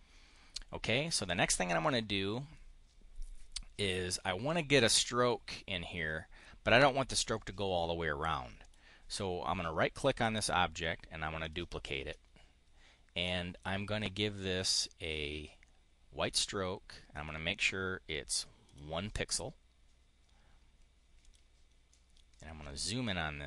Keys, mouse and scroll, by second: 1.7 click, 8.5 click, 10.2 click, 11.3 click, 13.1-14.5 drag, 17.1 click, 18.5 click, 21.1 click, 21.7 click.